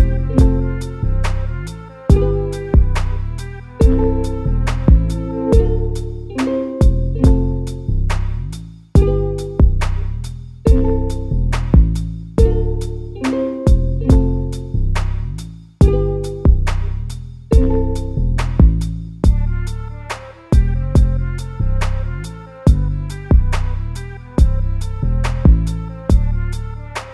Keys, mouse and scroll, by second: 0.0 KP_Divide, 1.8-4.7 drag, 4.7 Tab, 7.6 3, 9.0 middle click, 9.7 click, 10.2-11.6 middle drag, 11.6 shift+click, 12.1 middle click, 12.9 KP_Add, 13.1 KP_Add, 15.6-18.5 middle drag, 18.5 3, 18.9 click, 20.2 ctrl+z, 21.4 shift+click, 23.2 ctrl+shift+click, 23.9-25.2 middle drag, 25.2 ctrl+shift+click, 25.7 middle click, 26.6-27.1 scroll down 2.